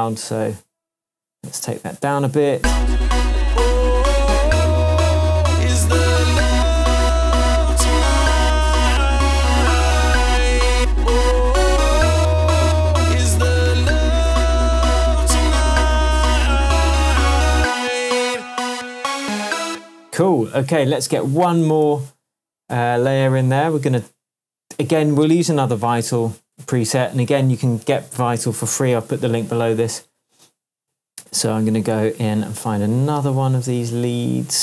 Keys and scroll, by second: 2.5 space, 19.7 space, 21.8 super+d.